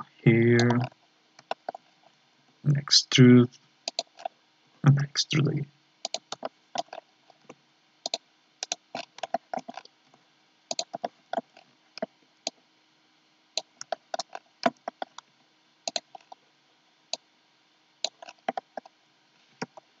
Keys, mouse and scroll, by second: 0.8 scroll up 4, 1.5 shift+middle click, 1.8 scroll up 3, 2.4 e, 4.2 scroll down 2, 4.6 e, 6.4 shift+middle click, 6.9-7.4 scroll up 5, 7.4 e, 8.6 right click, 8.9-9.8 scroll down 10, 9.3 shift+middle click, 10.0 e, 11.0 shift+middle click, 11.5 scroll up 4, 12.4-13.8 drag, 13.8-14.4 scroll up 4, 13.9 shift+middle click, 14.9 shift+middle click, 15.3 e, 16.1 scroll down 4, 17.1-18.2 drag, 18.2-18.6 scroll down 4, 18.6 middle click, 19.3-20.0 scroll down 2.